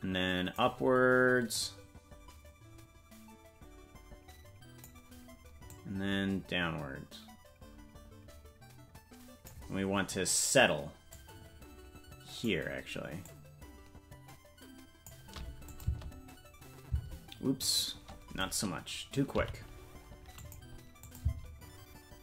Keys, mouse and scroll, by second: 1.5-4.9 drag, 5.6-9.5 drag, 11.1-12.5 drag, 13.2-15.1 drag, 15.6-17.0 drag, 15.8 space, 17.0 space, 17.5-18.6 right drag, 19.3 g, 21.0 click, 21.2 space.